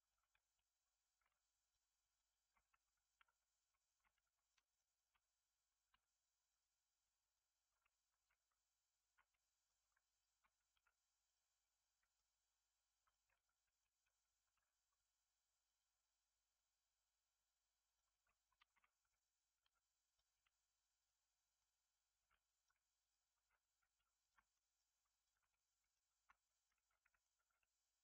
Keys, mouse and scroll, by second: 0.0 shift+click, 1.2 m, 1.9 middle click, 2.8 2, 2.9 click, 3.2 x, 3.8 shift+middle click, 4.2 1, 4.3 click, 4.6 shift+click, 4.9 shift+click, 5.8 m, 6.8 scroll down 2, 6.9 middle click, 7.7 2, 7.9 alt+click, 9.2 middle click, 10.0 alt+shift+click, 10.7 x, 11.5 right click, 11.8 middle click, 12.3 scroll down 1, 13.0 alt+click, 13.3 x, 13.7 middle click, 14.5 ctrl+r, 18.0 middle click, 18.9 2, 19.1 click, 19.6 x, 20.3-22.1 middle drag, 22.1 2, 22.5 alt+click, 22.9 click, 23.3 alt+z, 24.1 shift+click, 24.5 right click, 24.5 middle click, 25.2 shift+click, 25.5-26.7 middle drag, 26.7 alt+z, 26.9 middle click, 27.3 g.